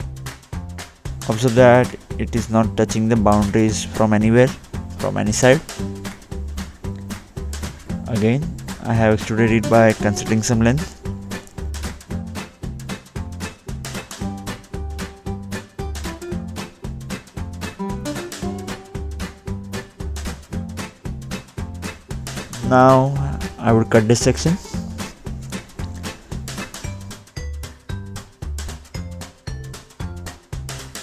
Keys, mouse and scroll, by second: 0.9-1.4 scroll up 1, 1.4-3.2 scroll down 2, 4.1 click, 5.7 click, 8.2 middle click, 9.6-10.4 scroll down 1, 10.5 middle click, 13.0 click, 16.6-17.9 scroll up 1, 17.9 scroll up 1, 18.0 click, 18.4 middle click, 19.1 scroll up 1, 19.3-20.1 scroll down 2, 20.1 scroll up 1, 20.3-21.3 scroll down 1, 21.3-21.7 scroll down 1, 22.0 click, 22.1 ctrl+8, 22.7 click, 23.0 double click, 23.7 click, 24.9 Escape, 26.8 right click, 28.8 click, 30.2 click.